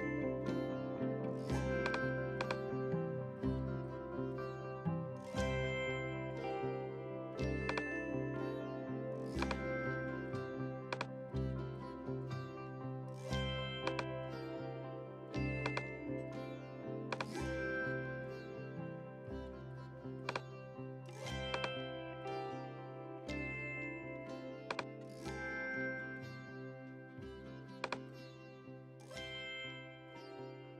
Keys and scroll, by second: 0.8 a, 8.5 b, 10.4 a.